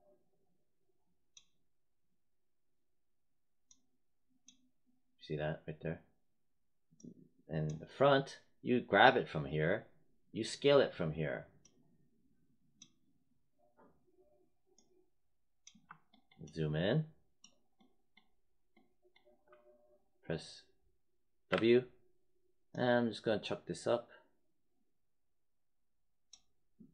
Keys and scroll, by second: 21.4 w.